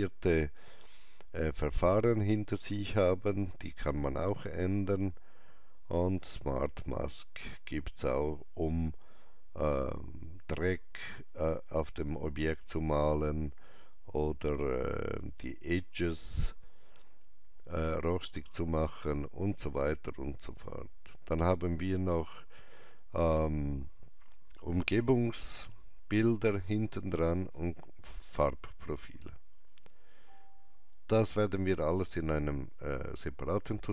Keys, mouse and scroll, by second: 2.7 click, 2.7 scroll down 1, 6.1 click, 6.1 scroll down 1, 11.8 click, 11.8-12.8 scroll down 1, 14.4 click, 14.4-15.0 scroll down 1, 19.4 scroll down 1, 20.5 click, 27.4 click, 27.4 scroll down 1, 28.6 scroll down 1, 29.5 scroll up 1, 30.3 scroll down 1, 31.6 click.